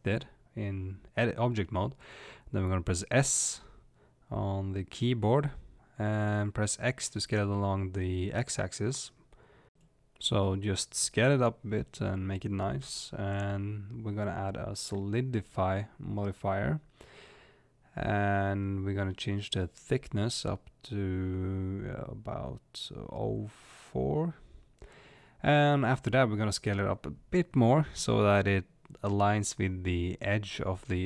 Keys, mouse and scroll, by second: 6.5 s, 17.0-28.0 drag, 28.8 s.